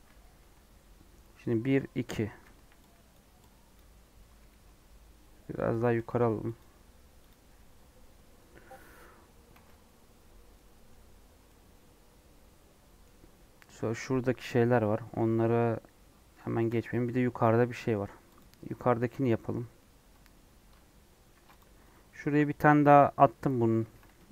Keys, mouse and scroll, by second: 0.4 3, 3.1 click, 3.7 click, 4.3 g, 6.0 g, 7.3 click, 7.4 3, 7.8-8.1 scroll down 1, 8.1 scroll up 1, 9.5 alt+z, 10.4 scroll down 1, 10.5 middle click, 11.0-11.3 scroll up 1, 11.3 scroll down 1, 11.4-18.4 middle drag, 18.4 click, 18.5 Tab, 19.1 Tab, 21.3 ctrl+r.